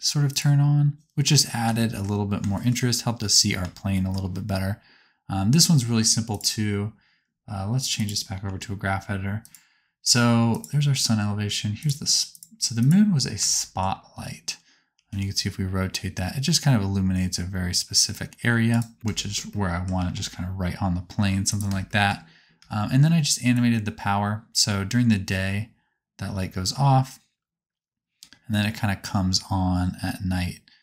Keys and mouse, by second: 0.2 click, 0.3-1.3 middle drag, 3.9-6.2 shift+middle drag, 6.2-9.5 drag, 9.5-10.5 middle drag, 10.5 click, 10.6-11.7 middle drag, 11.7 click, 11.8 middle click, 12.2 click, 12.7 click, 15.0 r, 19.0 shift+middle click, 19.9 r, 21.5 click, 21.7 shift+middle click, 23.6-29.0 drag.